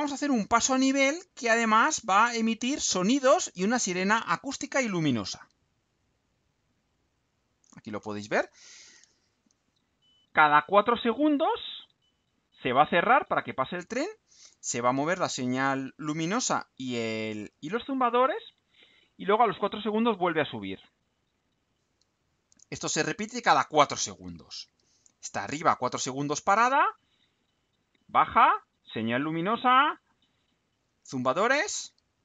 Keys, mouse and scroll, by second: 1.3 right click, 5.8 click, 7.0 click, 24.2 click.